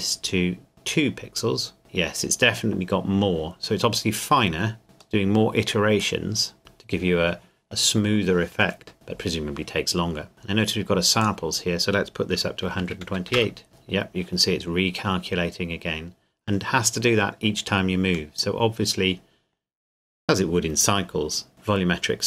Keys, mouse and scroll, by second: 5.2 middle click, 6.6 KP_0, 11.2 click, 12.6 KP_1, 12.8 KP_2, 13.0 KP_8, 13.3 KP_Enter, 15.6-17.1 scroll down 1, 17.1 middle click, 21.5-22.2 scroll up 1.